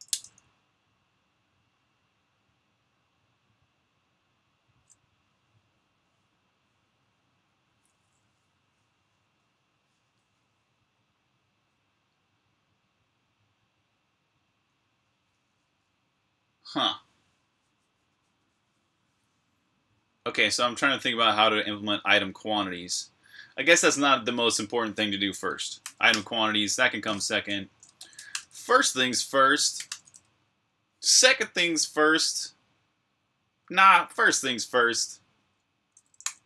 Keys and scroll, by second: 25.6 v, 25.9 Return, 27.4-28.4 typing, 29.6 typing, 35.8-36.4 typing.